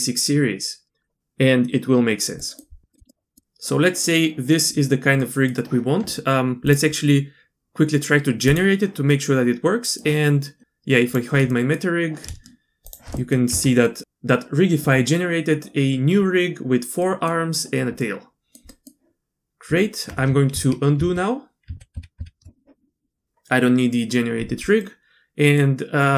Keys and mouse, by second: 2.4 drag, 2.9 middle click, 3.1 middle drag, 5.2 middle click, 6.6-7.7 drag, 8.5 click, 9.1-10.0 middle drag, 11.1 click, 11.5 middle click, 12.8 shift+click, 13.1 middle drag, 13.5 Tab, 13.8 click, 17.0 middle drag, 18.0-18.5 drag, 18.7 middle click, 19.6 Tab, 20.5 ctrl+z, 21.0 ctrl+z, 21.7 ctrl+z, 21.9 ctrl+z, 22.2 ctrl+z, 24.8 click, 26.0 click.